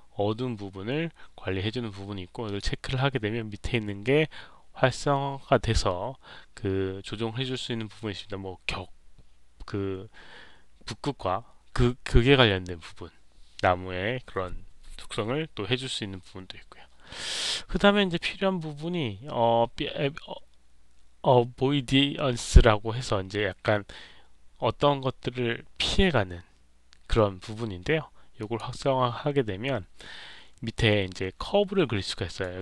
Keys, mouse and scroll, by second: 2.4 click, 18.1 middle click, 18.1 scroll down 1, 28.3 click, 29.7 middle click, 29.7-30.5 scroll down 3, 30.1 middle click, 32.2 click.